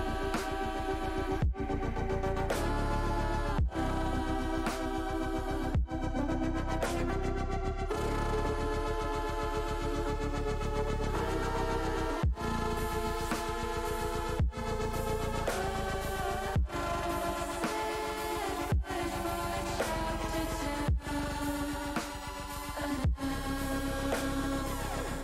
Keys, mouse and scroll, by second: 2.7-3.9 drag, 4.6 click, 6.8 click, 9.4 click, 10.5-11.8 drag, 12.3 click, 14.4 Delete, 16.4 shift+a, 21.6-23.3 drag, 23.7 middle click, 24.8 click.